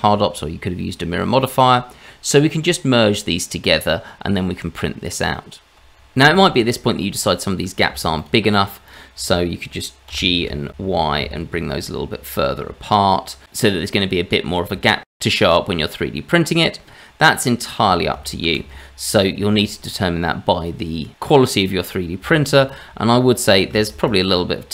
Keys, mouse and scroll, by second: 1.0 click, 1.0-1.6 scroll down 1, 1.6 click, 2.6-4.1 scroll up 4, 5.7 shift+click, 7.2-7.9 scroll up 2, 8.2 shift+click, 8.5 shift+click, 8.8 shift+click, 10.1 g, 14.9 shift+middle click, 16.8-17.8 scroll down 1, 17.8 scroll down 1, 18.4 ctrl+z, 19.1 scroll down 2, 19.5 click, 20.3-21.1 scroll up 3, 21.7-22.2 scroll up 3, 22.3 shift+middle click, 22.6 click, 23.0 Tab, 23.9 shift+z, 24.3 click.